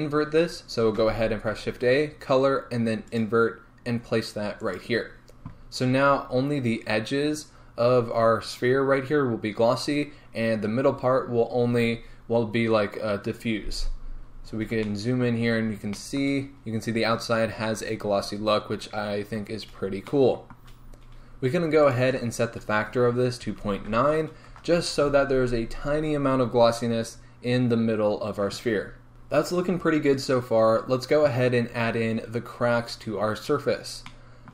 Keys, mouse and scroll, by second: 4.7 shift+a, 5.3-10.2 middle drag, 6.0-10.2 scroll down 2, 14.5 scroll up 1, 15.0-15.6 shift+middle drag, 15.6 scroll up 1, 16.0-16.4 shift+middle drag, 16.4 shift+scroll up 1, 18.8 middle click, 18.8-19.1 scroll down 3, 19.0-24.5 middle drag, 19.1-19.5 scroll up 2, 19.5-20.1 scroll down 2, 21.0-24.5 scroll up 2, 24.5-29.1 drag, 24.7 Return, 29.1 g.